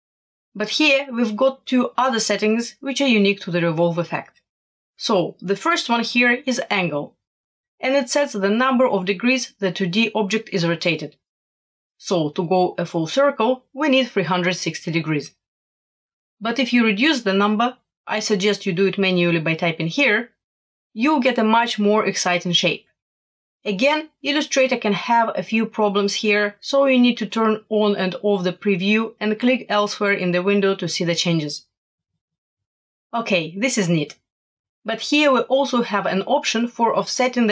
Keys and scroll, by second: 19.1 1, 19.4 8, 20.0 0.